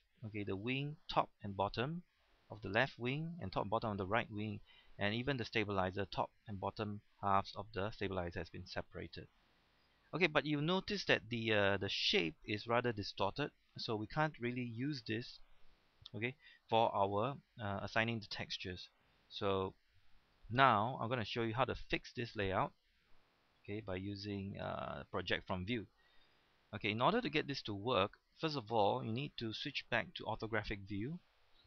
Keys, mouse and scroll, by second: 8.8-9.5 scroll down 1, 9.5-11.0 scroll up 1, 11.1 middle click, 11.8-17.4 scroll up 1, 19.6-20.7 middle drag, 20.7-21.2 scroll down 1, 23.9 click, 25.9-26.4 scroll up 1, 27.8-29.8 middle drag, 30.5 KP_5.